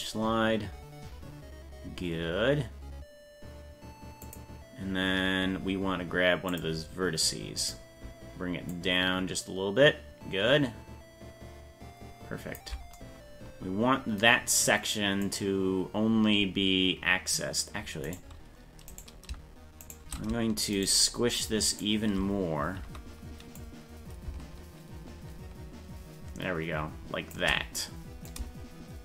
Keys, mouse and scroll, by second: 0.8 click, 1.4-4.3 drag, 6.5 click, 7.6 right click, 8.7-9.9 drag, 10.1 click, 11.5-12.6 drag, 15.2 right click, 18.1 right click, 18.9 right click, 19.9 shift+right click, 20.8 shift+right click, 21.7 shift+right click, 23.6-26.7 drag, 26.7 shift+click, 28.3 shift+click, 28.7 shift+click.